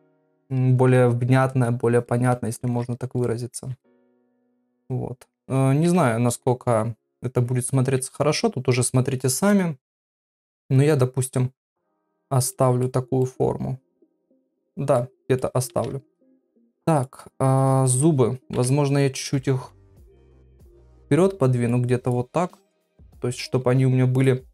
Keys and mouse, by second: 0.2 ctrl+click, 1.3 ctrl+click, 1.9 ctrl+click, 2.3 middle click, 3.3 middle click, 3.8 ctrl+middle click, 4.5 ctrl+middle click, 4.9 middle click, 11.6 middle click, 12.5 middle click, 13.2 middle click, 14.9 middle click, 15.7 ctrl+Tab, 17.8 click, 18.5 KP_1, 19.6 ctrl+KP_7, 21.0 click, 22.7 g.